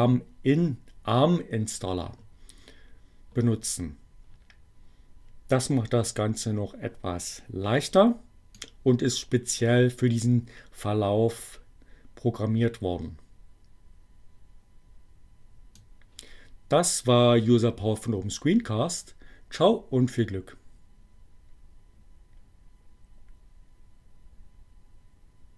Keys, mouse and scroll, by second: 8.4-16.2 drag.